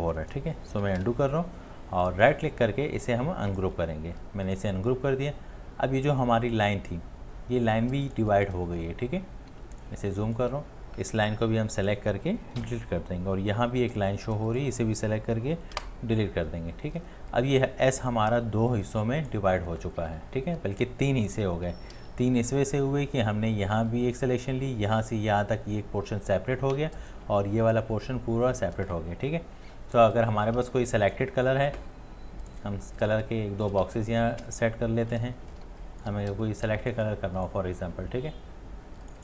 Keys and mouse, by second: 0.8 space, 1.0 ctrl+z, 2.3 right click, 9.5 space, 10.4 click, 10.4 space, 12.6 Delete, 15.7 Delete, 21.1 Delete, 21.3 ctrl+z, 22.0 ctrl+z, 30.8 space, 31.5 space, 33.2 shift+click, 33.5 shift+click, 33.6-35.0 shift+click, 33.9 v, 34.4 alt+click, 34.8 shift+click, 34.9 shift+click, 35.0 shift+click, 35.6 ctrl+Return, 35.7 space, 37.2 click.